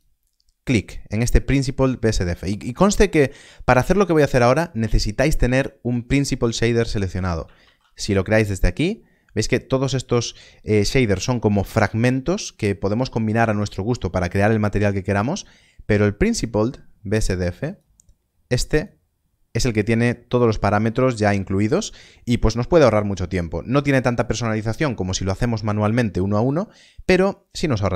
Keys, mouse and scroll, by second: 7.6 shift+a, 17.6 shift+a.